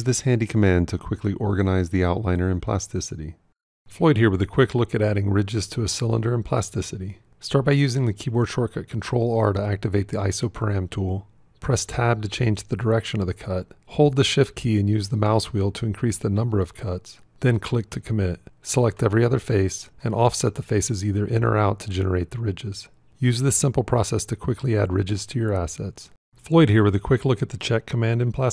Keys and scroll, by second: 10.0 ctrl+r, 11.8 Tab, 13.7-14.4 shift+scroll.